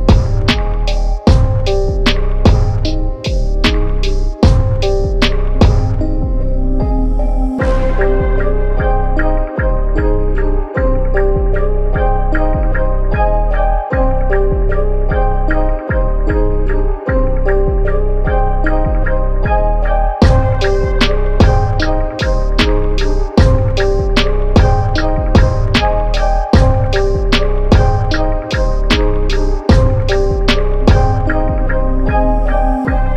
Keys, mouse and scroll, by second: 2.3 click, 4.8 click, 26.5 ctrl+0, 26.7-27.0 typing, 28.8 click, 31.4 click.